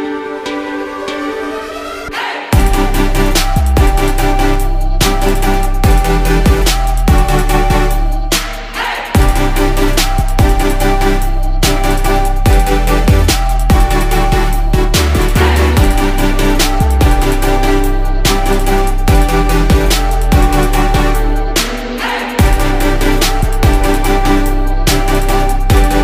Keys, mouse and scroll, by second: 1.3 ctrl+z, 4.1 right click, 5.2 ctrl+z, 7.0 ctrl+z, 8.0 ctrl+z, 12.8 ctrl+z, 14.0 ctrl+z, 15.8 ctrl+z, 16.8 ctrl+z, 19.9 ctrl+z, 21.6 ctrl+z, 23.5 ctrl+z.